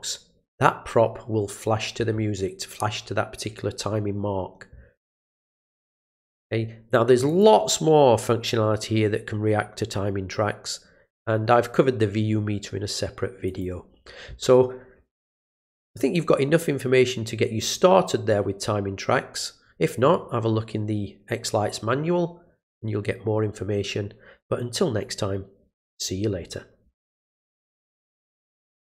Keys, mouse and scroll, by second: 5.6 click, 7.3 click, 13.4 click, 17.6 click, 27.5 click, 28.8 click.